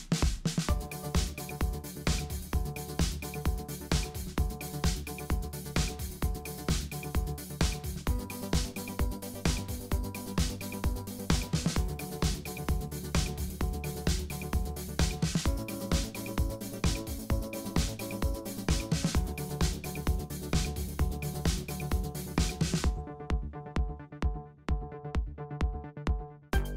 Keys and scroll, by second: 0.1-1.8 typing, 3.6-4.6 typing, 4.9 super+a, 6.4-8.2 typing, 8.8 Right, 8.8 Right, 9.0 Right, 12.4 Right, 14.5 Right, 14.6 Right, 14.8 Right, 19.1 super+0, 19.5 Left, 22.9 Right, 22.9 Right, 23.2 Right.